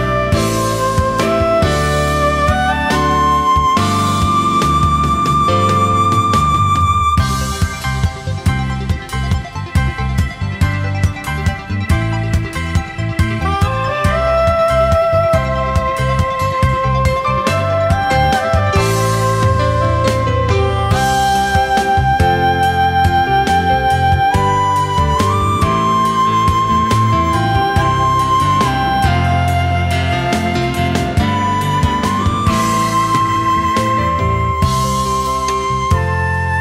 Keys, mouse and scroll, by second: 17.5 alt+scroll down 1, 17.7 space, 19.1 alt+scroll down 1, 19.5 space, 20.4-20.9 alt+scroll up 1, 24.7 ctrl+z.